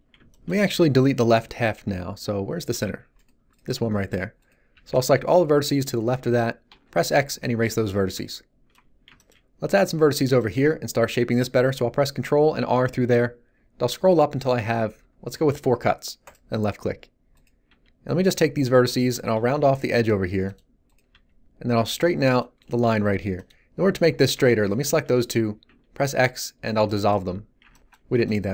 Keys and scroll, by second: 2.7 g, 2.8 z, 4.7 b, 6.6 x, 12.6 ctrl+r, 17.6 g, 25.7 x.